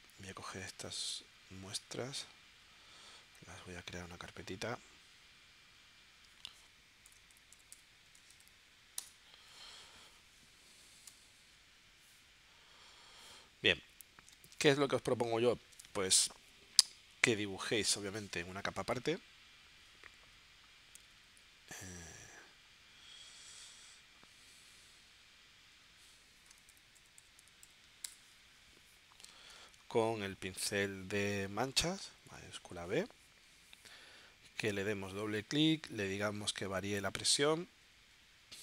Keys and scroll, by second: 11.1 v, 13.2 z, 14.3 space, 26.4 shift+d, 29.5 space.